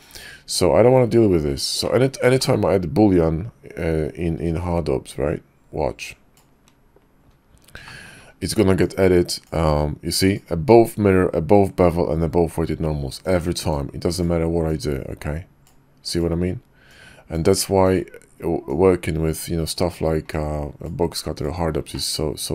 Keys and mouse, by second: 1.8 click, 2.4 shift+click, 6.1 click, 7.8 shift+middle click, 8.8-10.4 drag, 13.2-14.3 drag, 14.7-16.2 drag, 16.9-18.0 drag, 18.7-19.8 drag, 20.3-21.5 drag, 21.9-22.5 middle drag.